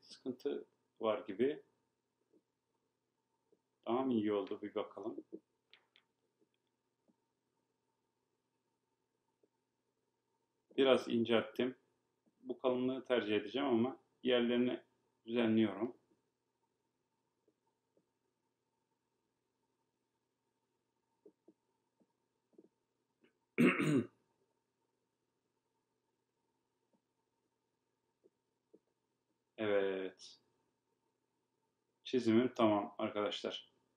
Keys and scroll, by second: 16.2 Right.